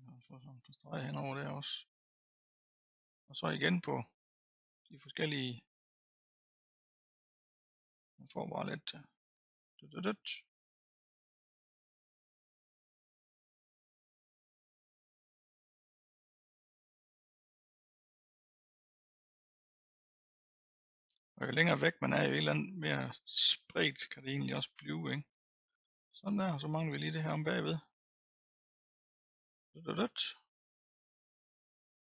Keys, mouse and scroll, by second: 2.7-3.1 scroll down 1, 3.1 middle click, 3.8-5.3 drag, 5.3-7.0 middle drag, 7.0-8.3 drag, 8.3-9.2 scroll down 1, 9.2 click, 10.1-11.0 scroll down 4, 11.0 middle click, 11.8-13.9 drag, 13.9-15.7 middle drag, 15.7-17.3 drag, 17.3-17.9 scroll down 2, 17.9-20.6 drag, 20.6-21.7 middle drag, 21.7-26.1 drag, 26.1 middle click, 27.0-28.1 scroll up 4, 28.1-30.1 drag, 30.1-32.0 middle drag, 32.0-32.1 drag.